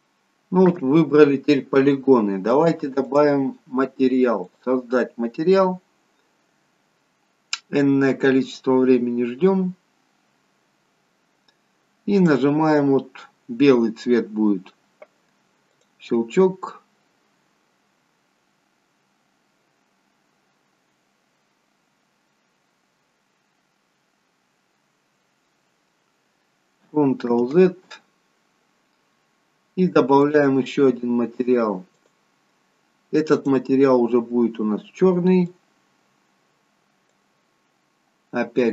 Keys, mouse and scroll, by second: 0.7-1.3 scroll down 1, 1.3-2.5 scroll down 1, 2.5-2.9 scroll up 1, 2.9 click, 4.4 click, 12.1 click, 28.1 ctrl+z, 30.1 click.